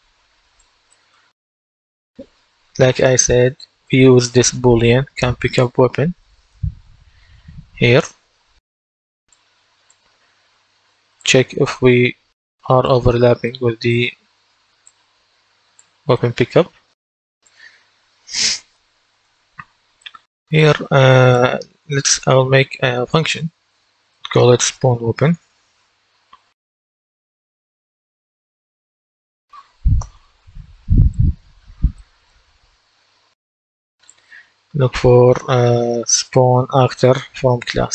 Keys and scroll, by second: 11.5 typing, 24.9-29.6 typing, 29.9 Return, 35.9-37.9 typing.